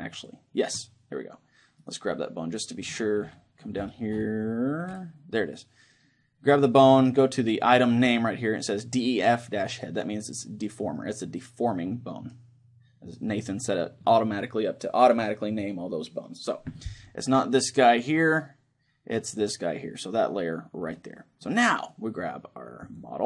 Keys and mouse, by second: 2.2-3.7 right drag, 10.0-13.0 middle drag, 21.2-22.9 middle drag, 21.8-22.9 right drag.